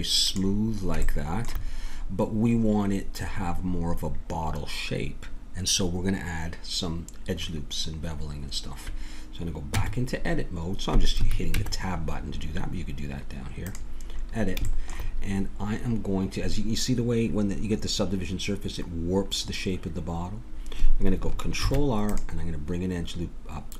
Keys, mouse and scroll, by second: 0.2-1.7 drag, 1.7-4.7 middle drag, 9.7 Tab, 11.5 Tab, 14.1 middle click, 17.0-19.7 middle drag, 21.6 ctrl+r.